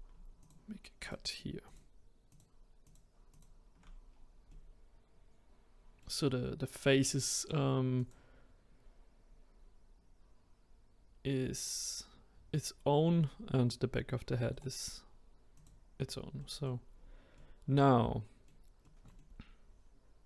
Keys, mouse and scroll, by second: 0.3 shift+click, 1.0 shift+click, 1.6 shift+click, 2.3 shift+click, 2.8 shift+click, 3.3 shift+click, 4.1-4.5 scroll down 1, 4.5-7.6 middle drag, 7.9 click, 8.7-10.1 scroll up 2, 14.5-16.3 right drag, 16.3 middle click, 16.9-17.3 scroll down 1, 17.3-20.2 middle drag.